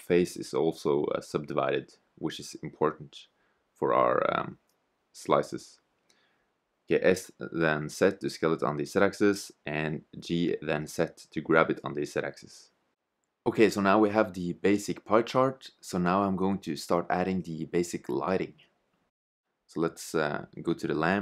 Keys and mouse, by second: 0.7 Tab, 3.2 s, 5.9 g, 7.8 s, 11.1 g, 15.5 click, 15.6-16.7 middle drag, 18.6 right click, 20.3 middle click.